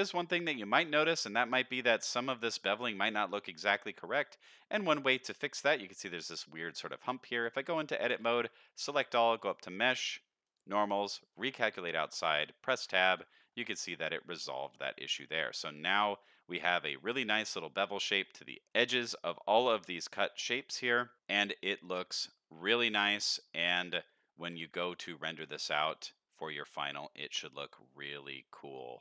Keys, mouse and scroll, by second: 0.0-0.4 scroll up 2, 0.3 middle drag, 2.6 middle drag, 3.2-3.8 scroll down 2, 3.6 middle drag, 4.0-5.0 scroll up 2, 5.0 scroll up 1, 7.4 Tab, 8.1 a, 9.3-12.3 drag, 12.3 Tab, 12.8 alt+a, 13.4-13.9 scroll up 2, 15.0-15.4 scroll down 2, 15.4 middle click, 15.8 middle click, 16.2 scroll up 1, 18.1-18.4 scroll down 2, 18.4 middle click, 19.1 shift+middle drag, 19.5-20.0 middle drag, 20.3 scroll up 2, 20.6 shift+middle click, 21.1 middle click, 21.1-22.4 scroll up 1, 23.0-23.4 scroll down 2, 23.4-23.9 middle drag, 24.2-24.5 shift+middle drag, 24.7 scroll down 1, 25.0 middle click, 25.4 scroll up 2, 25.7 shift+middle drag, 26.1 shift+scroll down 1.